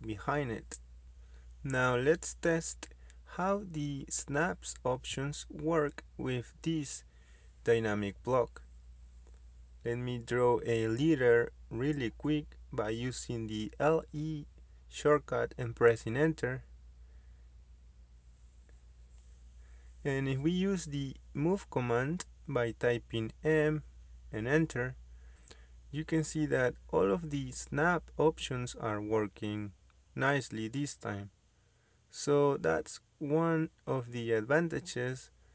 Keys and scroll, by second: 5.8-6.5 typing, 13.1 Escape, 15.2 m, 15.4 space.